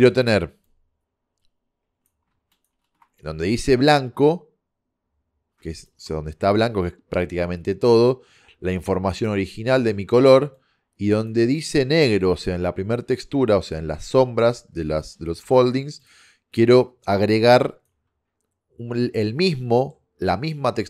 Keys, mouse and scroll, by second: 0.7 click, 3.6-4.5 drag, 5.9-7.6 drag, 8.8-10.0 drag, 9.8 middle click, 11.5 click, 15.5 shift+d, 19.5 middle click.